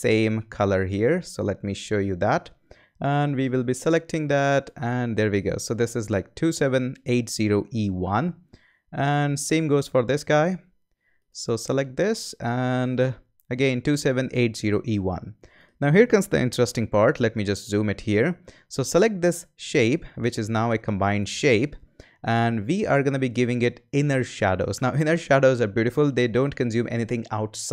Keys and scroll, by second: 16.6 z.